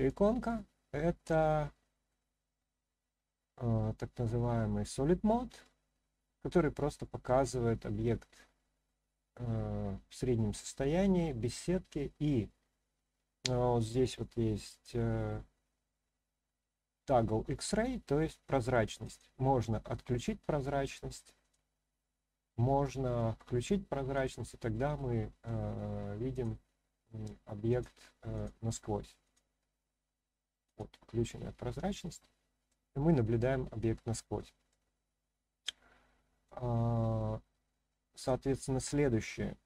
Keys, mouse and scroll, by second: 0.4-1.3 shift+middle drag, 1.7-2.1 middle drag, 5.6-7.2 middle drag, 7.6-8.1 scroll down 1, 8.1-8.6 scroll up 1, 8.6-11.5 middle drag, 19.0 click, 20.1-21.1 middle drag, 21.4 click, 22.0-23.1 middle drag, 24.1 click, 24.7-25.4 middle drag, 26.3 click, 27.7 click, 28.3 click, 29.2 click, 30.6 click, 31.2-32.7 middle drag, 33.0 scroll up 1, 33.1-34.7 middle drag, 35.8-36.4 middle drag, 38.2 click, 39.2-39.6 middle drag.